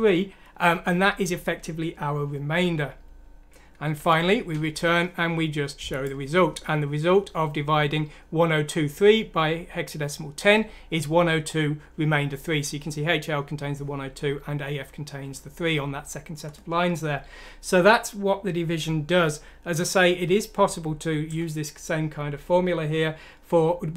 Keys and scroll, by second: 3.9 F7.